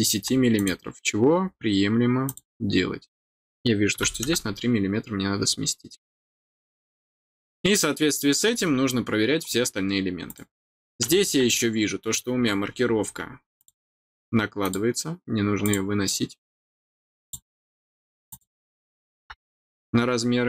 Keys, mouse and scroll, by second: 0.5 click, 2.2 click, 6.6 scroll down 1, 7.5 middle click, 9.7 scroll down 1, 10.2 click, 13.5 click, 14.6 click, 15.6 click, 17.2 click, 18.2-20.4 drag, 19.5 scroll down 1, 20.2 middle click.